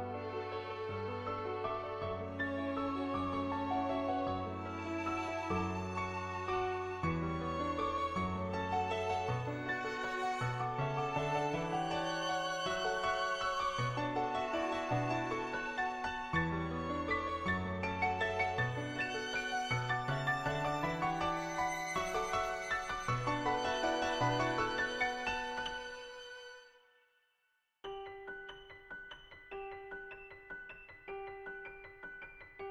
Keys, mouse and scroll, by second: 3.3 ], 3.4 ], 3.6 click, 4.1 [, 4.3 [, 5.1 click, 6.7-7.9 drag, 7.9 [, 8.1 [, 8.3 click, 9.0 ctrl+z, 9.1 ], 9.2 ], 9.5 click, 9.9 click, 10.4 click, 10.9 click, 11.6 click, 11.9 click, 15.4 click, 16.9 click, 20.3 click, 20.8 click, 21.3 click, 22.8 click, 23.4 click, 23.9 click, 25.1-28.6 drag, 28.8-31.0 drag, 31.2 click, 31.2 [, 32.0 [.